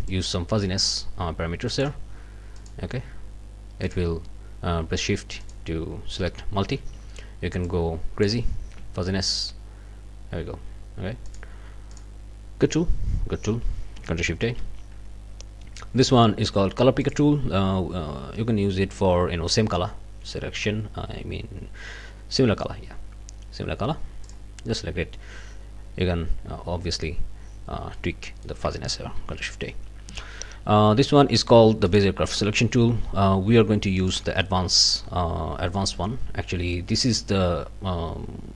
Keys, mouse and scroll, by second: 0.1-2.0 drag, 2.7 click, 3.8 click, 5.4 shift+click, 7.7 click, 9.3 shift+click, 11.3 shift+click, 11.9 shift+click, 14.4 ctrl+shift+a, 17.2 click, 24.3 click, 27.9 click, 29.1 ctrl+shift+a, 31.9 click, 34.0 click, 35.7-38.5 drag.